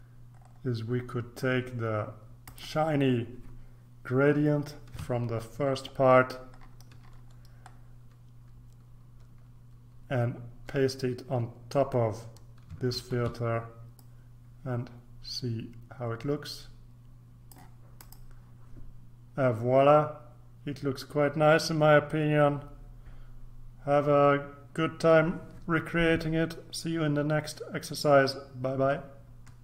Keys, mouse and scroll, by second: 0.2-2.4 scroll up 3, 2.4 click, 4.9 ctrl+c, 6.1-8.6 scroll down 3, 10.6-12.8 scroll down 4, 12.9 ctrl+v, 13.9-18.7 drag.